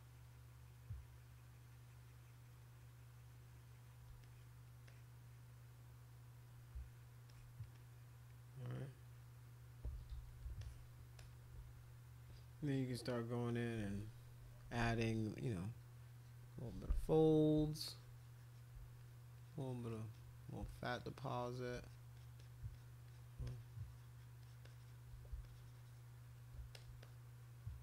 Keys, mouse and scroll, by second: 4.2 click, 4.9-7.1 drag, 7.3 alt+click, 7.7 click, 9.0 click, 9.4 click, 9.9 ctrl+z, 10.1 ctrl+z, 10.6 alt+click, 11.2 click, 13.1 click, 14.7 [, 14.9 [, 15.9 click, 16.1 click, 17.6 shift+click, 19.0 click, 19.4 click, 19.6 click, 19.9 click, 20.1 click, 20.4 click, 20.7 shift+click, 21.0 shift+click, 21.2 shift+click, 21.4 shift+click, 21.8 click, 22.1 click, 22.4 click, 22.7 alt+click, 23.1 alt+click, 23.4 shift+click, 23.6 shift+click, 24.4 shift+click, 24.6 shift+click, 25.4 shift+click, 26.7 alt+click, 27.0 click.